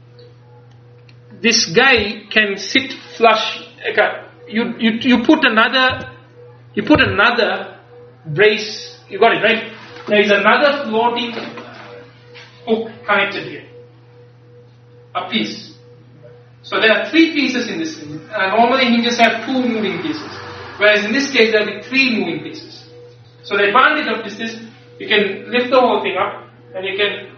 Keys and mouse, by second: 1.2-3.3 middle drag, 5.2 middle click, 6.0 a.